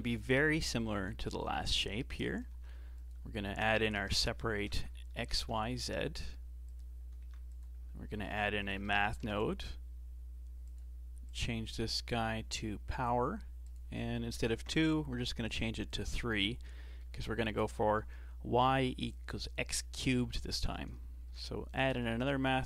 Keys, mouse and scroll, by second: 0.7 g, 1.9-2.5 scroll up 1, 2.5 shift+a, 5.2 Down, 7.2 shift+a, 11.3-16.7 drag, 16.7-19.1 shift+middle drag, 19.1-20.7 drag, 21.2 shift+d, 22.5-22.6 drag.